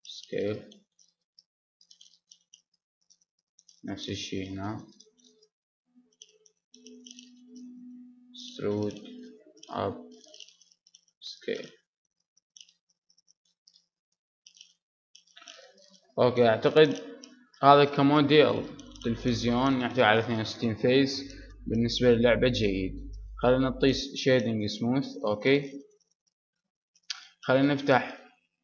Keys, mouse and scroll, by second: 0.6-2.3 drag, 2.1 s, 2.3 middle click, 2.7-4.5 drag, 4.9 right click, 5.8 click, 5.9 right click, 6.0 click, 6.2-7.8 middle drag, 8.2 e, 9.2 middle click, 10.3-12.6 drag, 10.8 s, 12.9 a, 14.0 middle click, 14.8 Tab, 15.0 middle click, 15.2 middle click, 15.8-17.8 middle drag, 17.8 middle click, 24.5-26.5 drag, 26.5 middle click, 28.1-28.6 drag.